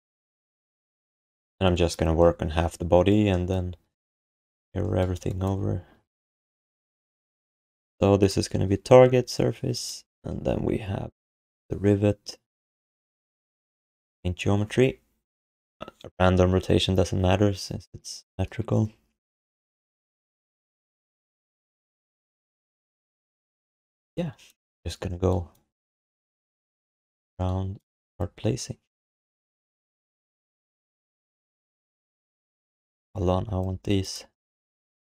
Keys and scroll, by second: 5.9 ctrl+s, 30.7 1, 31.8 q, 33.1 1.